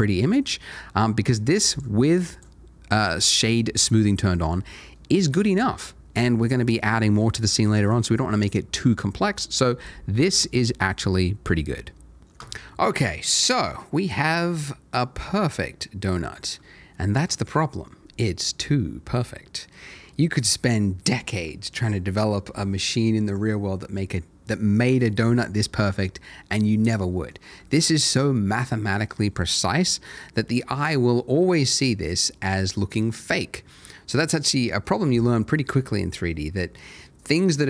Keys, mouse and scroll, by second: 1.0 middle click, 1.7 right click, 2.3 click, 3.0 middle click, 3.7-4.2 scroll down 1, 4.2 middle click, 11.1 middle click, 12.2 click, 13.0 middle click, 16.9 shift+middle click, 19.3 middle click, 25.6 middle click, 33.3 middle click.